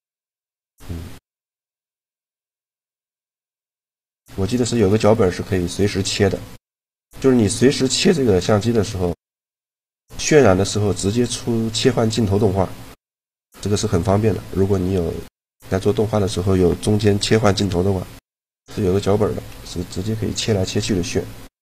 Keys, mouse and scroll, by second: 1.5-3.2 drag, 4.2-5.7 middle drag, 6.9 middle click, 19.1 middle click.